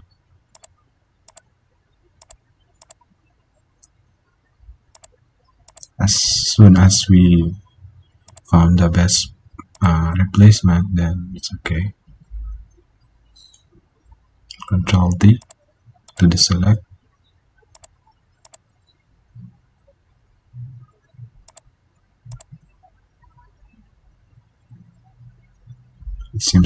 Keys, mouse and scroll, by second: 15.2 ctrl+d, 19.3 ctrl+z, 20.4 ctrl+d, 24.5 ctrl+d.